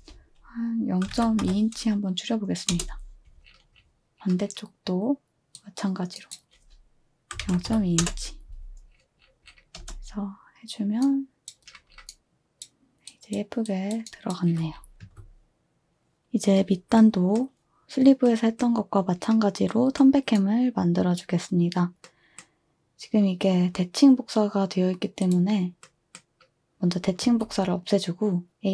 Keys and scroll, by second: 0.8-1.9 typing, 2.8 Return, 7.4-8.5 typing, 8.0 Return, 9.8 space, 11.3-11.8 typing, 13.1 typing, 15.1 2, 27.2 a.